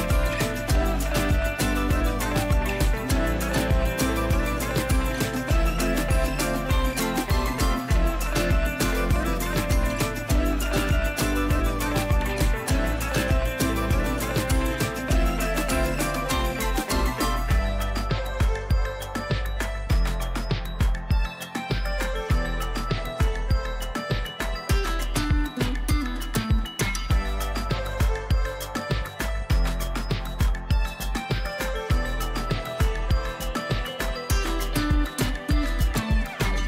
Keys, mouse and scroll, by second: 0.9 space, 1.2 right click, 1.4 space, 2.6 click, 3.4 o, 4.1 ], 4.6 ], 5.1-6.1 click, 8.5 space, 8.7 right click, 8.9 click, 9.2 v, 9.6 ctrl+space, 9.9 ctrl+click, 10.1-10.9 ctrl+space, 11.3 scroll up 1, 11.8 o, 12.4 ], 12.7 [, 13.4-14.1 click, 18.1-18.9 typing, 19.1-19.7 click, 22.0 space, 22.2 right click, 22.4 click, 22.7 v, 23.0 ctrl+space, 23.3 ctrl+click, 23.5 ctrl+space, 24.1 click, 24.3-25.6 space, 26.2 ctrl+b, 27.5-30.9 drag, 31.2-32.5 scroll up 1, 34.5 click.